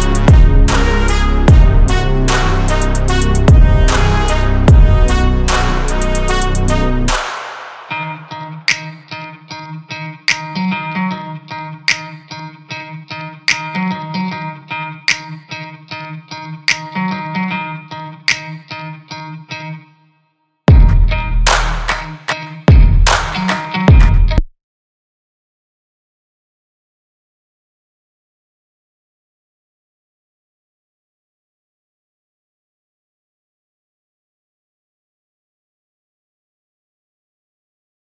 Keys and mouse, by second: 4.4 click, 5.9-6.7 middle drag, 7.0 alt+click, 7.9 alt+click, 8.6-9.0 middle drag, 11.0 shift+drag, 11.0 shift+right drag, 15.0 alt+click, 15.0 alt+right click, 16.5 shift+click, 18.7 click, 20.3 h, 21.9 Tab, 22.4 1, 23.8 click, 26.1-27.8 drag, 28.3 click, 28.8 shift+middle click, 29.6 shift+middle click, 30.6 s.